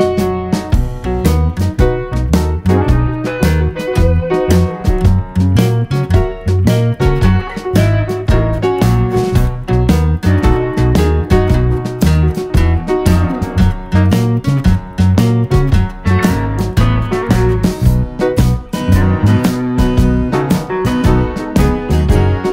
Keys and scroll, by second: 10.2-11.9 typing, 15.6-16.3 typing, 21.4 d.